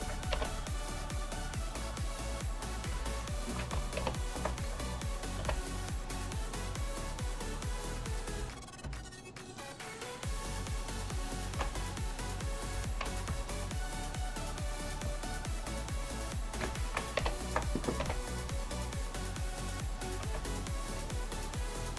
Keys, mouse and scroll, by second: 0.4 h, 2.0 click, 3.1 shift+click, 4.1 ctrl+j, 5.4 h, 8.5 click, 8.9 shift+click, 9.4 shift+click, 10.4 shift+click, 10.9 shift+drag, 11.2 shift+click, 13.4 shift+click, 14.5 shift+click, 16.0 shift+click, 17.2 ctrl+j, 18.1 h, 18.6 click, 19.9 click, 20.5 shift+click, 20.8 shift+click, 21.8 shift+click.